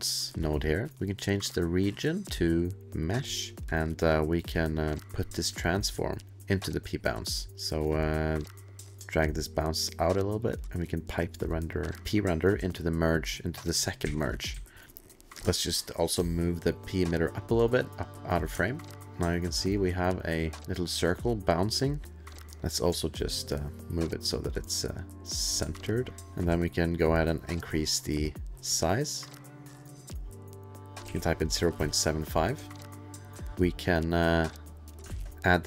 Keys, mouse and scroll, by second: 1.1 alt+click, 1.4 alt+click, 3.0 alt+click, 3.6 alt+middle click, 3.6 alt+click, 4.8 alt+click, 7.2 alt+middle click, 7.5 alt+click, 7.5 alt+middle click, 8.4 alt+click, 9.9 alt+click, 11.1 alt+click, 13.5 alt+click, 14.0 alt+2, 14.6 alt+middle click, 14.8 alt+click, 15.1 click, 15.2 middle click, 15.8 middle click, 15.9 click, 16.3 middle click, 16.5 click, 16.9 alt+middle click, 17.2 alt+middle click, 17.7 click, 18.6 alt+middle click, 19.1 alt+space, 19.1 alt+middle click, 19.3 alt+middle click, 19.7 alt+middle click, 19.7 alt+middle click, 19.7-20.2 alt+click, 20.2 alt+middle click, 20.2 alt+click, 20.8-22.4 alt+scroll, 22.4 alt+space, 22.4 click, 23.8 click, 25.7-26.1 alt+scroll, 26.9 alt+click, 28.5 alt+click, 29.4 alt+click, 31.0 alt+click, 31.0 alt+KP_7, 31.8 alt+KP_Enter, 32.7-33.6 alt+scroll, 33.5 click, 34.7 click.